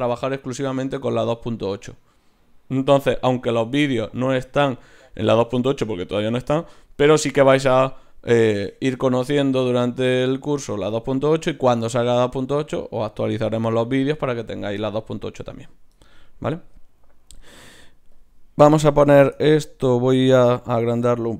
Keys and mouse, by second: 18.1-20.2 drag, 20.2 z, 20.7 right click.